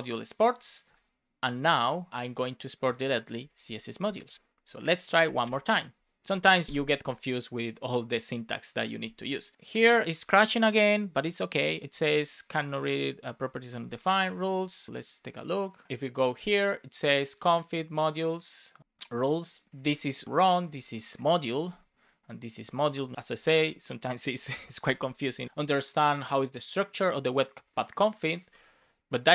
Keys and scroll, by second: 0.5 Return, 0.8 space, 4.0 Return, 4.2 super+s, 5.2 Up, 5.4 Return, 20.7 Right, 21.1 BackSpace, 22.9 BackSpace, 24.3 ctrl+c, 25.0 Up, 25.4 Return.